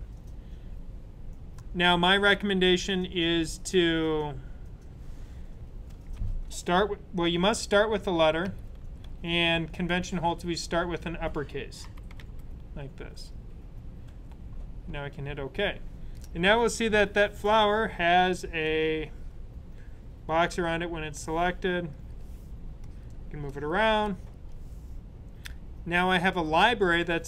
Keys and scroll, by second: 8.1-9.4 typing, 11.5-12.5 typing.